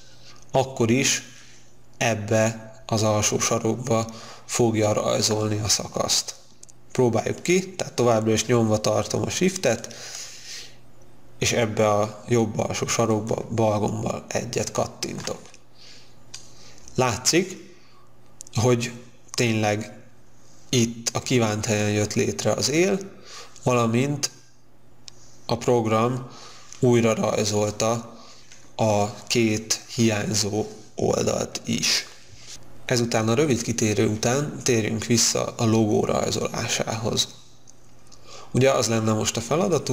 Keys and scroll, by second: 16.4 space.